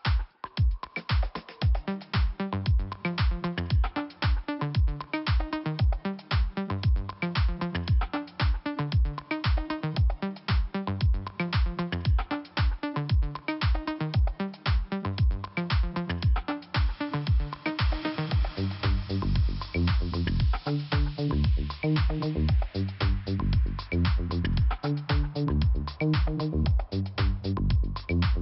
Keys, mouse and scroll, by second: 0.2 click, 2.3 scroll up 2, 2.9 click, 3.9 click, 7.0 click, 8.0 click, 8.6-8.9 scroll down 1, 10.3-10.6 scroll down 1, 12.5 click, 12.6 click, 14.2 middle click, 15.1 scroll down 1, 15.7 scroll up 1, 17.0 click, 17.8 click, 17.9 click, 18.0 click, 18.1 click, 19.9 scroll down 1, 20.5-21.2 scroll up 1, 22.7 click, 22.8 click, 24.2 click, 26.6 click.